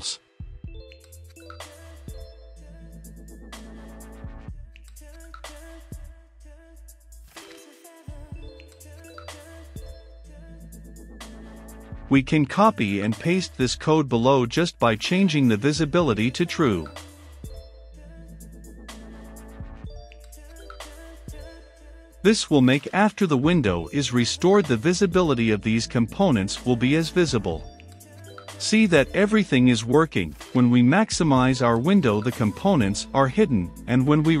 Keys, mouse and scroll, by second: 0.0-10.5 typing, 11.8 click, 14.0 Return, 14.3 ctrl+v, 14.9 ctrl+click, 15.3-19.1 typing, 15.3 click, 16.1 click, 16.7 click, 17.9 click, 19.1-34.4 drag.